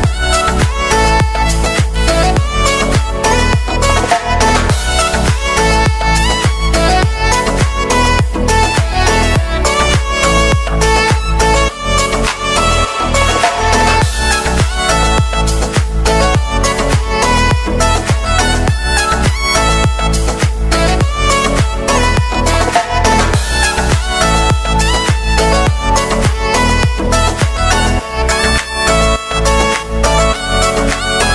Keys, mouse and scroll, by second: 3.3 shift+middle click, 4.3-5.1 scroll up 1, 5.1 click, 6.6 click, 7.5 shift+click, 8.1 shift+click, 8.7 shift+click, 9.3 shift+click, 9.9-11.0 shift+middle drag, 11.0 click, 11.5-13.6 middle drag, 13.6 shift+click, 14.2-15.6 middle drag, 15.6 shift+click, 16.3 shift+click, 16.6 scroll down 2, 16.9 middle click, 17.5-19.0 scroll up 3, 19.0-20.5 scroll up 18, 21.2 click, 22.3-28.5 drag.